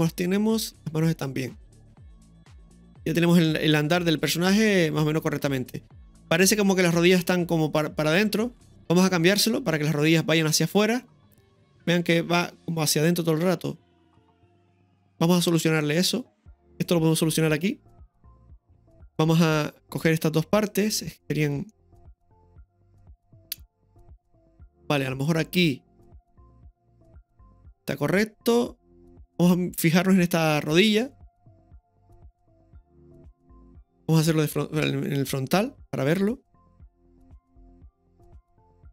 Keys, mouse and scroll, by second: 2.3-4.6 middle drag, 2.3-2.8 scroll down 1, 8.7 space, 11.7-15.6 drag, 16.6 click, 18.3 right click, 19.6 middle click, 19.6 scroll up 2, 20.5-21.5 right drag, 21.7 shift+middle click, 22.9-25.0 drag, 25.4-27.4 middle drag, 28.5-29.4 drag, 30.5-31.0 middle drag, 31.7-34.0 drag, 34.8 KP_1, 37.1-38.9 drag.